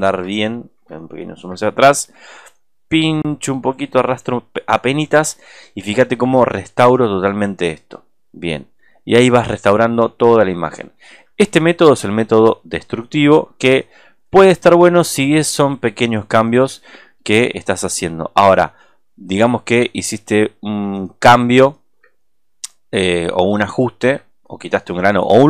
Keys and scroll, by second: 1.0 alt+space, 9.6 space, 10.7 alt+space.